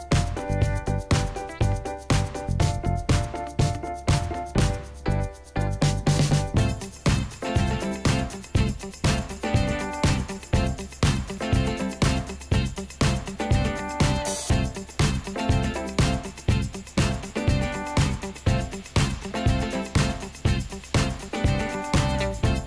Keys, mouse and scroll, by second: 13.7 scroll down 1.